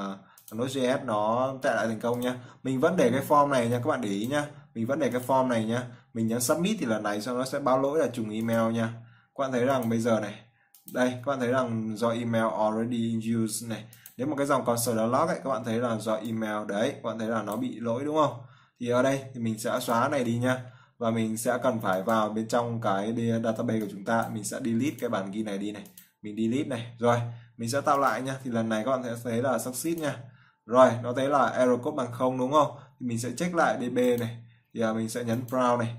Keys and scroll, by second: 0.2-1.0 typing, 2.4-3.2 typing, 8.1-9.6 typing, 24.9 typing.